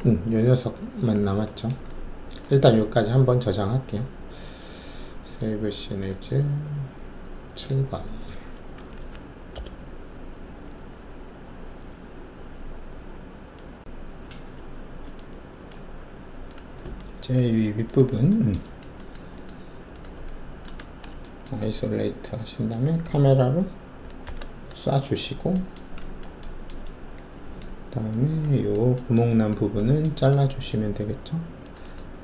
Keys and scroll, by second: 8.7 Delete, 8.9 typing, 9.5 Return, 20.8 alt+shift+a, 24.2 ctrl+shift+c.